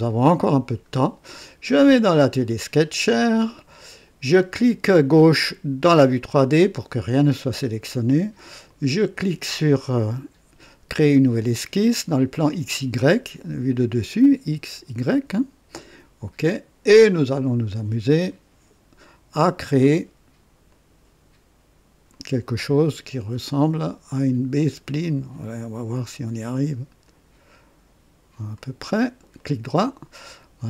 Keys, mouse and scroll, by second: 0.3 click, 1.8 click, 5.8 click, 8.6 click, 15.7 click, 18.1 click, 20.6 click, 22.1 click, 23.5 click, 24.9 click, 27.0 click, 28.5 click, 29.3 right click.